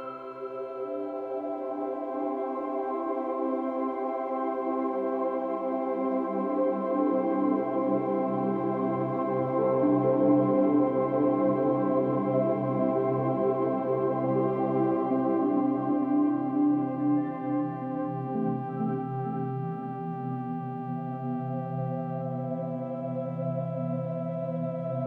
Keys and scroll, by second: 5.5 ctrl+-, 5.6 ctrl+=, 5.8 space, 17.9 ctrl+-, 18.9 ctrl+=, 20.5 ctrl+s, 21.9 space, 24.8 ctrl+e.